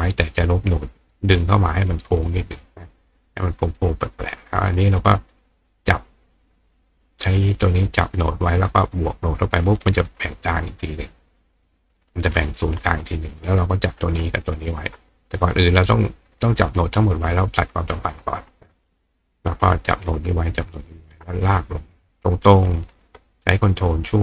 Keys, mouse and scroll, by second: 0.1 click, 1.3 click, 3.3 click, 4.7 click, 5.4 drag, 6.0 click, 6.4 click, 7.2 click, 7.8 click, 9.5 click, 11.2 drag, 12.4 click, 13.7-14.0 drag, 15.5-16.5 drag, 17.8 click, 18.7 click, 19.7-20.0 drag, 20.6 shift+drag, 22.5-24.2 ctrl+drag.